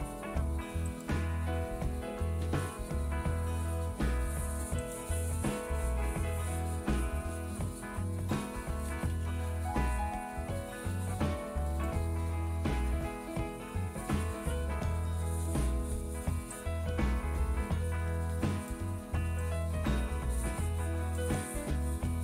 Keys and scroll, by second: 0.0-0.5 typing, 5.8 typing, 7.8-8.9 typing, 9.1 Return, 11.9 typing.